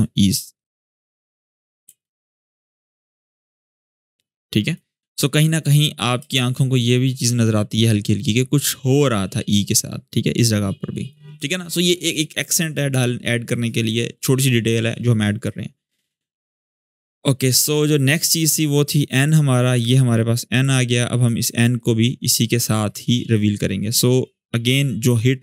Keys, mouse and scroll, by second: 1.6 shift+space, 3.8-4.8 click, 5.9 space, 7.5-10.9 drag, 15.2-17.3 drag.